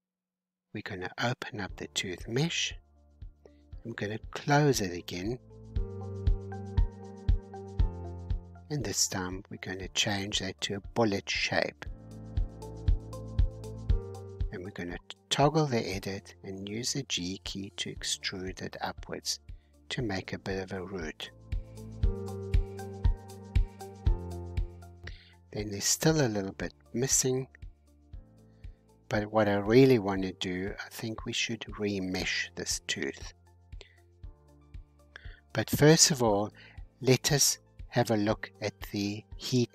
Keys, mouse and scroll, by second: 0.8 click, 1.8-4.7 middle drag, 6.4-8.7 middle drag, 8.7-11.8 drag, 11.8-14.2 middle drag, 14.2-16.0 drag, 16.0 g, 17.8 Tab, 18.6 alt+h, 19.0-21.0 middle drag, 21.0-21.5 scroll down 1, 21.5-24.7 middle drag, 24.7-25.2 scroll down 1, 25.2 middle click, 26.0-26.6 scroll down 2, 26.6 middle click, 27.3-27.8 scroll down 1, 27.8-29.0 scroll up 3, 29.0 scroll up 1, 29.0-30.0 shift+middle drag, 30.0-34.6 drag, 34.6-36.1 scroll up 16, 36.4-38.6 scroll up 23, 39.5 scroll down 3.